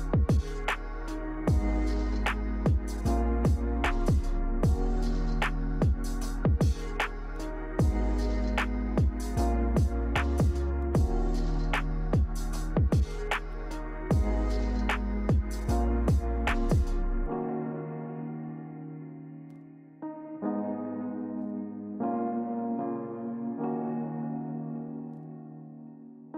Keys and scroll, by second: 0.7 z, 7.5 v, 20.4 g.